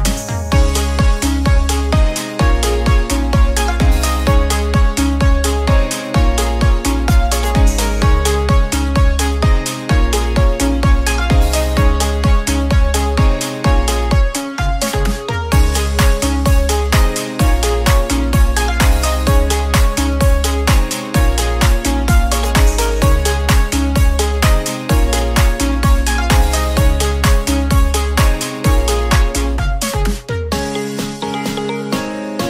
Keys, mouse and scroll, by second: 1.3-2.8 middle drag, 2.8 e, 3.7 click, 6.6-8.3 middle drag, 8.3 s, 11.5-12.9 middle drag, 12.9 click, 15.0 click, 15.7 middle click, 16.3 s, 20.0 scroll up 1, 20.2-21.0 middle drag, 21.0 click, 21.5-22.6 middle drag, 22.6 click, 23.5 click, 24.4 click, 25.9 middle click, 26.7 ctrl+z, 27.2 middle click, 28.0 click, 29.2-30.9 middle drag, 30.9 click, 32.0-32.4 middle drag.